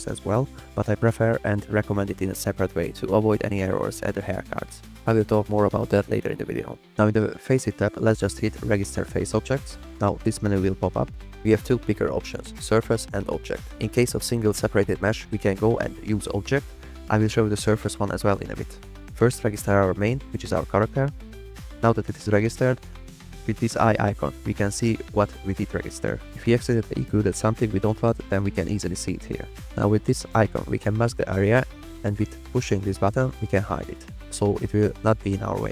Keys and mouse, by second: 0.1 ctrl+drag, 1.0 ctrl+drag, 1.4 ctrl+drag, 3.7 click, 7.9 click, 14.4 drag, 15.5 click, 15.9 click, 16.4 click, 16.7 middle click, 19.8 click, 24.7 click, 28.7 click, 29.4 click, 33.2 click, 34.2 middle click.